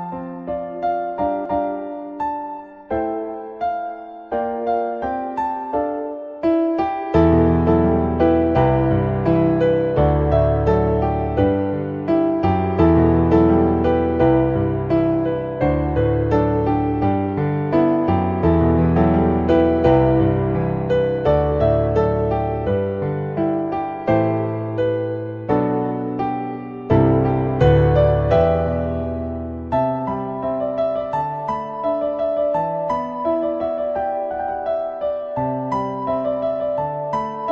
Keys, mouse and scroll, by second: 0.8 middle click, 5.3 middle click, 6.6-7.1 middle drag, 10.0-13.4 drag, 14.3-17.0 drag, 17.5-19.2 drag, 19.7-21.6 drag, 22.0 shift+middle click, 22.4 middle click, 23.1 shift+middle click, 23.5 middle click, 24.6-26.2 drag, 26.6 shift+middle click, 27.8-28.8 drag, 29.1-31.3 drag, 32.1-32.6 shift+middle drag, 32.9 middle click, 33.5 shift+middle click, 34.8-36.5 drag, 37.1 middle click.